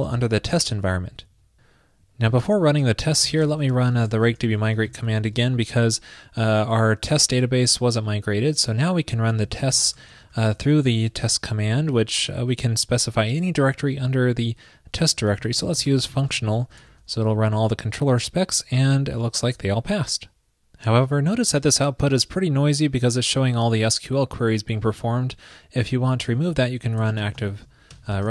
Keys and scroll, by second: 26.6 super+k.